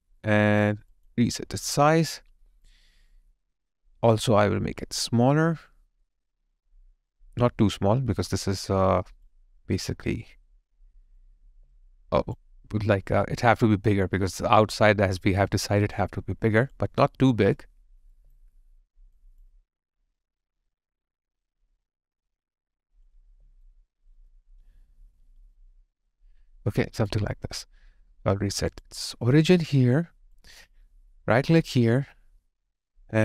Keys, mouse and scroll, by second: 11.6 alt+right click, 11.8 alt+click, 15.5 alt+right click, 15.9 alt+click, 18.1 alt+right click, 18.5 alt+middle click, 19.1 alt+click, 23.3 alt+right click, 24.3 alt+middle click, 29.9 alt+click, 31.2 right click.